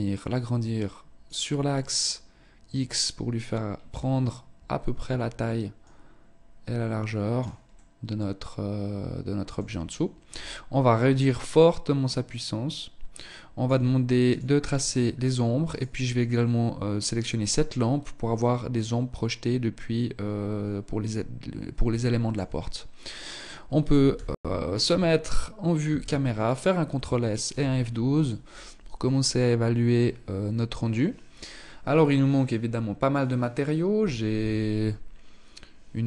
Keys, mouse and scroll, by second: 0.9 middle click, 4.9 click, 6.8 middle click, 10.4 click, 13.4 click, 14.7 right click, 15.5 middle click, 21.1 shift+middle click, 21.7-23.2 scroll up 2, 23.2 KP_0, 24.8 ctrl+s, 35.9 Escape.